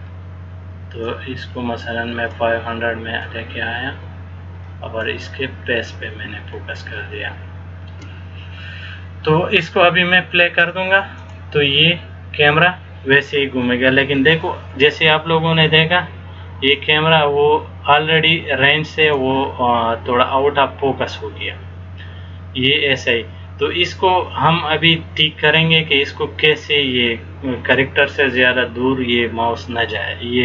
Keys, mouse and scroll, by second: 1.2 click, 3.4 click, 5.8-6.3 scroll down 3, 6.7 shift+middle click, 11.3 click, 16.9 click, 20.6-21.4 scroll down 4.